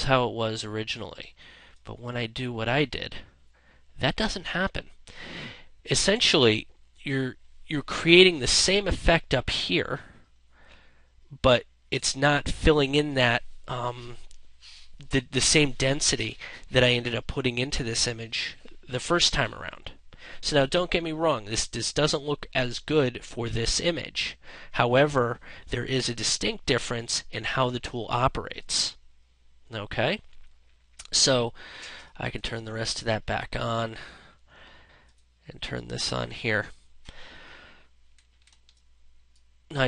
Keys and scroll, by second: 26.2 ctrl+0, 37.9 ctrl+space.